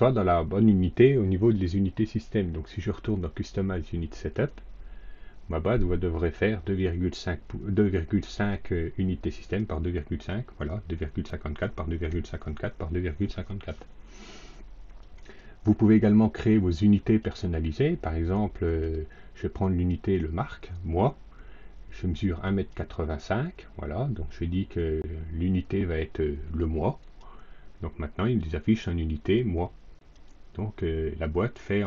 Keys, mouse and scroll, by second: 4.2 click, 8.2 click, 9.3 click, 15.1 click, 16.9 click, 18.6 click, 19.5 click, 20.1 click, 22.4 click, 26.9 click, 29.1 click.